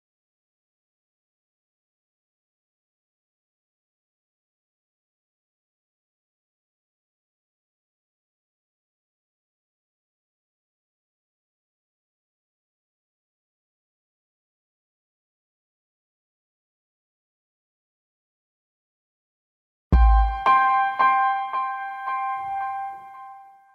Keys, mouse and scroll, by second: 1.0 click, 2.2 click, 3.5 click, 5.1 shift+right click, 16.1 click, 18.5 click, 18.9 click.